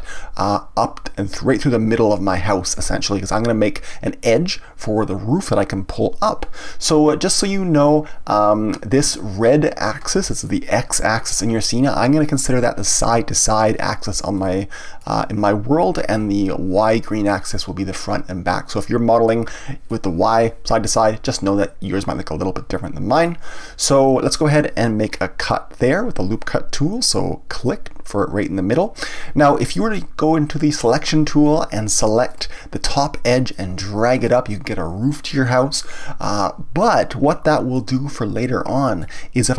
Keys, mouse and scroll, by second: 14.3-17.4 middle drag, 17.9-21.0 middle drag, 21.2-24.2 middle drag, 25.1-27.6 scroll up 1, 27.6 click, 30.8-32.4 drag, 33.5-36.5 drag, 37.7-39.5 middle drag.